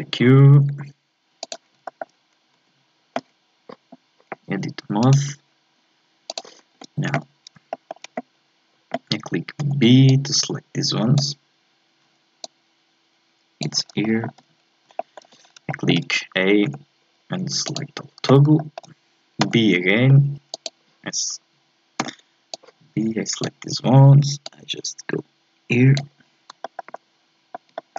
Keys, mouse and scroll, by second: 0.7 s, 1.9 shift+middle click, 2.5 Tab, 5.0-6.3 right drag, 6.3 click, 6.7 a, 7.7-9.6 shift+middle drag, 9.6 b, 12.4-13.8 drag, 13.8 scroll down 2, 14.0 shift+middle click, 14.5-15.0 scroll up 2, 15.0 shift+middle click, 15.5 scroll down 1, 15.7 shift+middle click, 16.6 a, 18.6 shift+middle click, 19.5 b, 22.0 b, 24.4-26.2 drag, 26.2-26.6 scroll down 3, 26.6-27.9 shift+middle drag.